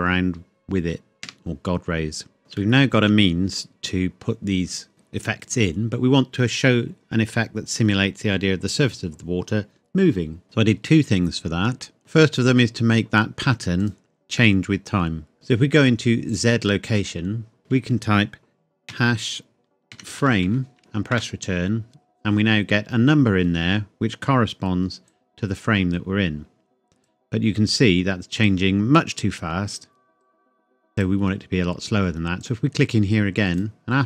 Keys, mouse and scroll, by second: 1.2 Escape, 2.4 scroll down 1, 2.8 shift+middle click, 13.8 click, 14.4 middle click, 15.1 scroll down 1, 15.3 scroll up 1, 16.3 click, 17.6 BackSpace, 19.9-21.3 typing, 25.1 click, 27.3 scroll up 1, 28.5 click.